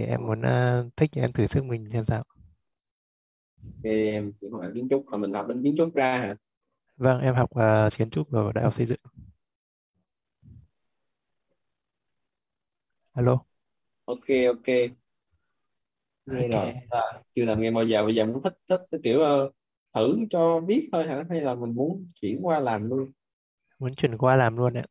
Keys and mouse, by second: 0.4 Left, 0.8 Right, 3.4 shift+,, 8.3-13.5 typing.